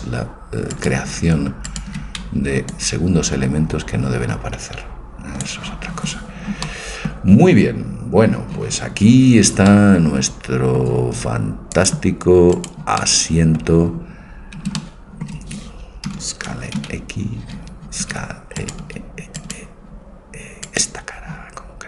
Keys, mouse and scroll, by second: 0.8-3.5 right drag, 2.7 click, 3.7-5.5 drag, 6.7-8.6 middle drag, 9.1 middle click, 9.8-11.6 middle drag, 11.8-14.5 drag, 12.5-14.5 right drag, 13.1-14.5 middle drag, 16.1 a, 16.8 x, 18.1 a, 18.6-21.8 right drag, 18.8 a.